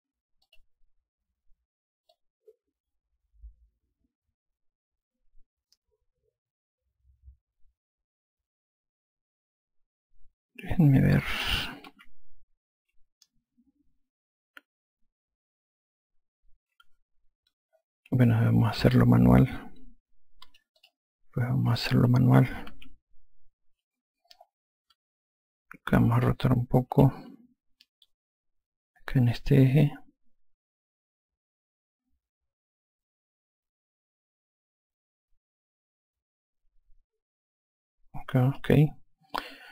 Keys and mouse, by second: 0.8 click, 2.5 alt+click, 12.3 F2, 17.2 F1, 19.0 click, 21.2 click, 23.1 F2, 27.3 r, 30.1 click.